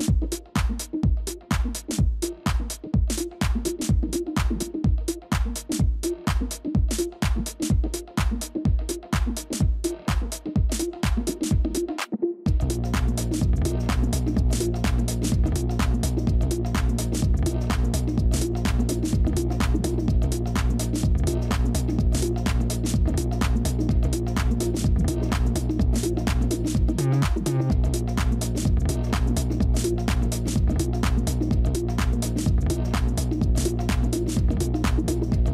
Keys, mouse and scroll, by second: 7.0 shift+click, 15.5 Delete, 18.8-21.8 scroll down 1, 22.3 double click, 28.2 right click, 33.7 right click.